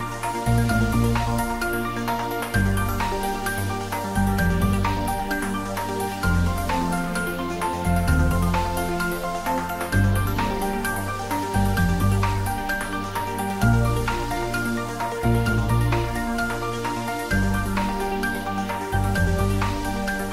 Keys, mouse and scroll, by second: 0.1-1.4 drag, 1.9-3.1 drag, 3.7 click, 5.7 1, 6.5 Return, 8.4 click, 10.3-11.1 scroll down 1, 11.1 click, 11.7-12.7 scroll up 1, 12.7-13.7 middle drag, 15.1-15.7 middle drag, 19.0 scroll down 1, 19.4-20.0 middle drag.